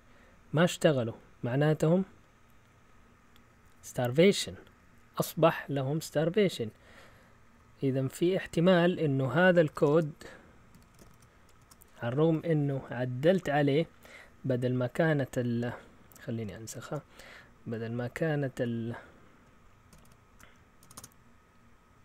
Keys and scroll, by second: 8.1 Down, 8.3 Down, 9.4-13.5 typing, 11.5 Return, 18.3-20.9 typing.